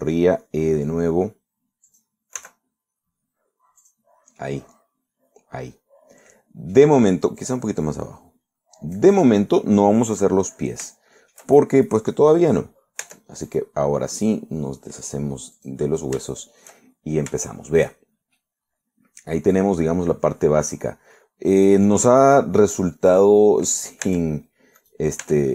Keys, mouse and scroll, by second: 0.6 e, 2.9 click, 3.4 s, 4.9 click, 5.5-8.0 middle drag, 8.5-10.2 drag, 10.3-11.7 middle drag, 11.9 shift+middle click, 14.1 Tab, 14.5 right click, 16.6 click, 17.3 shift+middle click, 18.0-18.6 shift+scroll up 1, 18.6 shift+middle click, 19.1-19.4 shift+scroll down 1, 19.4-22.8 middle drag, 23.0-23.3 scroll up 1, 23.3 middle click, 25.1 Tab.